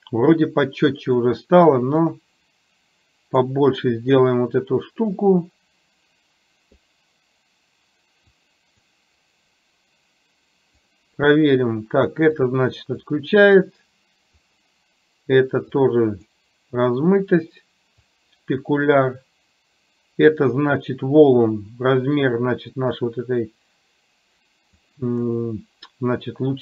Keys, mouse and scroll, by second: 2.1-3.4 drag, 5.3-6.8 drag, 8.4 click, 10.9 click, 12.6 click, 13.7 click, 15.9 click, 18.1-24.8 drag.